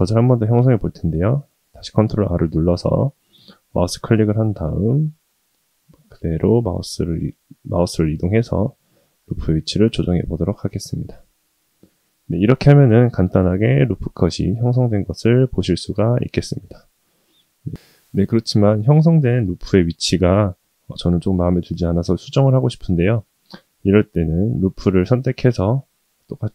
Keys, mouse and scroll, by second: 9.0-12.0 middle drag, 12.3-12.9 scroll up 2, 12.9-13.8 middle drag, 15.1-16.5 middle drag, 17.2-17.6 middle drag, 18.2-18.7 middle drag, 19.9-20.4 middle drag, 21.2-22.4 middle drag, 22.9-24.2 middle drag, 24.9 click.